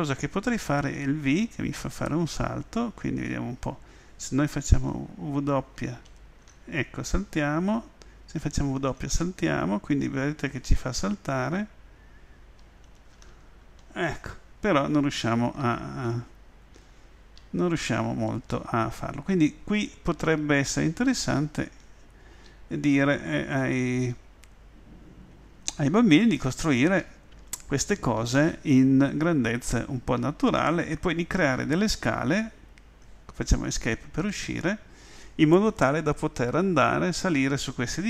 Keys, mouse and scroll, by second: 1.9 v, 5.8 w, 12.7 middle click, 13.0 middle click, 13.5 middle click, 13.7 middle click, 15.6-17.9 typing, 20.2-20.9 typing, 22.5-27.8 typing, 30.2 w.